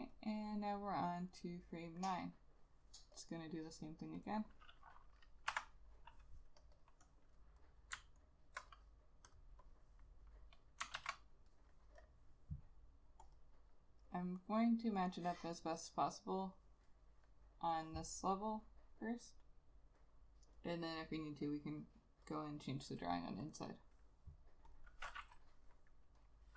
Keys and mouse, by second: 2.4 double click, 5.6 F6, 6.9 double click, 8.3 alt+click, 11.1 ctrl+a, 13.5 double click, 22.5 double click.